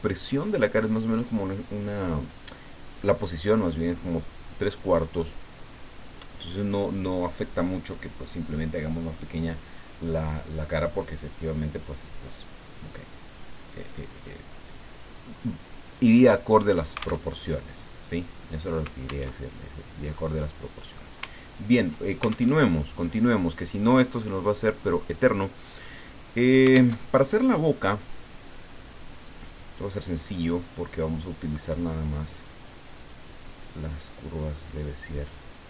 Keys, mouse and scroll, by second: 5.2 ctrl+click, 17.3 alt+Tab, 19.3 alt+Tab, 20.2-21.3 drag, 21.4-21.8 ctrl+scroll up 2, 22.6 alt+Tab, 26.9 alt+Tab, 28.7 click, 32.4 click, 33.1 click.